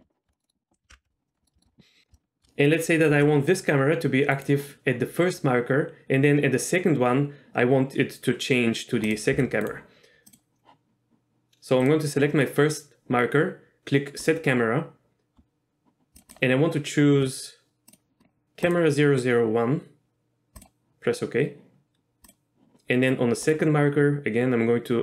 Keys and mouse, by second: 0.2 shift+middle click, 0.4 middle drag, 1.0 ctrl+alt+KP_0, 1.3 middle drag, 2.3-3.3 shift+middle drag, 3.3 g, 4.5-4.9 right drag, 9.2 click, 9.5 g, 9.8 right drag, 10.4 click, 14.5-20.8 drag, 23.6-25.0 drag.